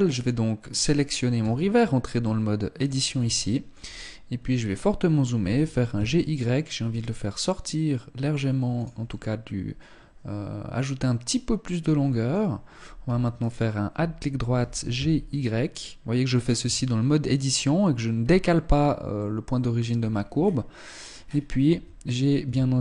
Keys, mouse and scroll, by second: 1.0 Tab, 1.7 middle click, 2.7 scroll up 1, 2.9 shift+middle click, 3.5-4.1 scroll up 1, 4.9 g, 8.6 middle click, 12.9 alt+right click, 14.1 g, 16.3 Tab, 18.3-18.9 scroll down 3, 18.7 middle click, 19.5-20.5 scroll down 6, 20.5-21.5 scroll up 10, 21.3 Tab, 22.0 a, 22.3 a.